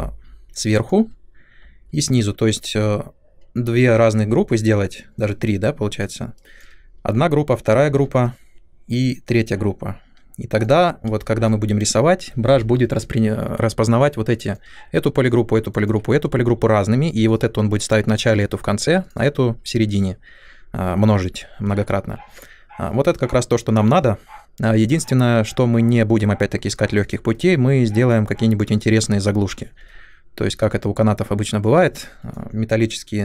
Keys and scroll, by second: 3.8 w, 11.0 space, 27.3 Delete.